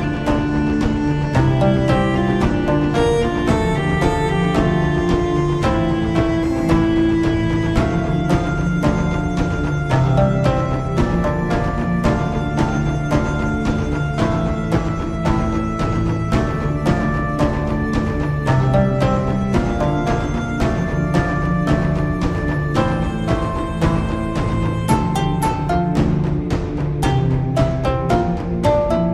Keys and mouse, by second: 2.5-4.3 middle drag, 25.8 middle click, 27.1-28.7 middle drag.